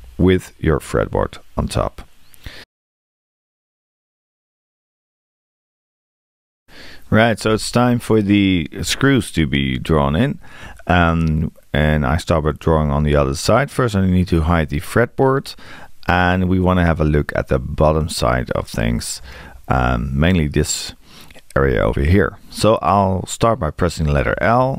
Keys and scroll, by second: 24.2 l.